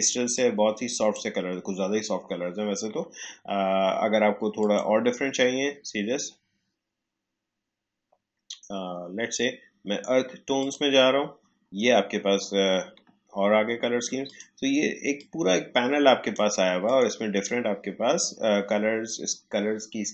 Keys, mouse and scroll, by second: 0.3-4.5 drag, 4.5 click, 10.5 click, 14.2-16.8 drag.